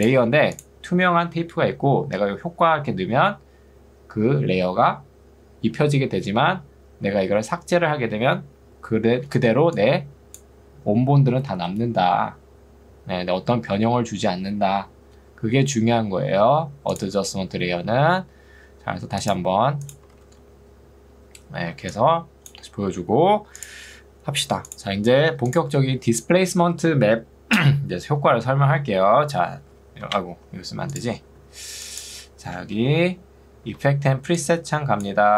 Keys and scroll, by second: 20.2 ctrl+z, 21.8 ctrl+2, 23.0 Escape, 29.0 ctrl+space, 29.8 d, 30.0 BackSpace, 32.2 d, 32.6 BackSpace, 33.8 ctrl+2.